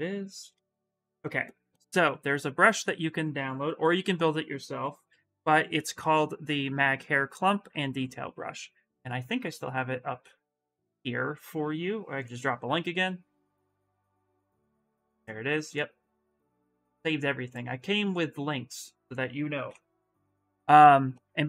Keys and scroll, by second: 4.6 b, 16.3 ctrl+a, 16.5 ctrl+c, 16.7 ctrl+c, 19.4 ctrl+v, 19.8 Return.